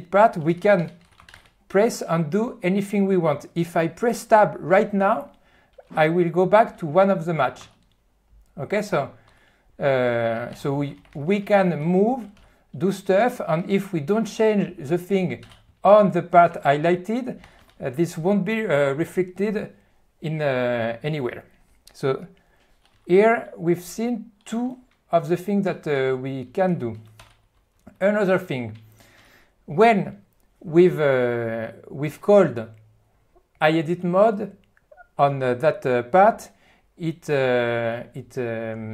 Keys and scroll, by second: 0.3-1.5 typing, 7.6 Tab, 10.5-12.3 typing, 12.4 alt+d, 13.3 BackSpace, 15.4-17.6 typing, 23.0 q, 25.7 ctrl+F1, 27.6-29.2 typing.